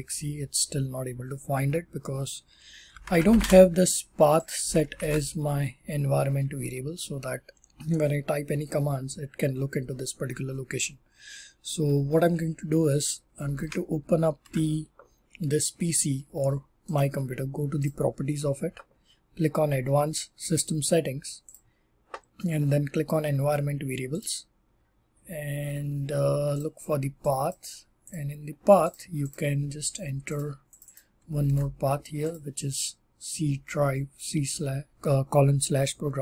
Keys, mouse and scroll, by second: 2.5-5.3 typing, 4.4 click, 4.6 alt+d, 4.9 ctrl+c, 5.2 click, 13.3 click, 13.5 ctrl+w, 14.3 super+e, 16.9 right click, 17.7 click, 20.5 click.